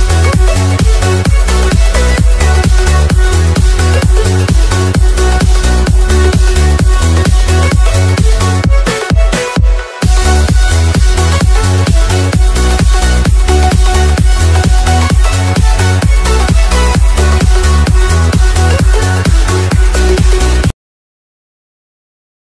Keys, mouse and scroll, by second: 1.7 s, 4.9 click, 16.3 ctrl+c, 16.8 click, 18.6 click.